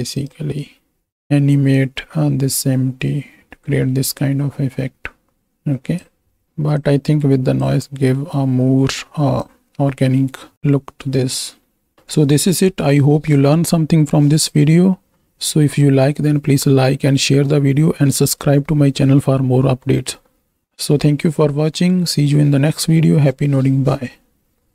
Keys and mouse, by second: 2.0-6.0 drag, 6.9 click, 8.2 middle click, 9.4-11.9 drag.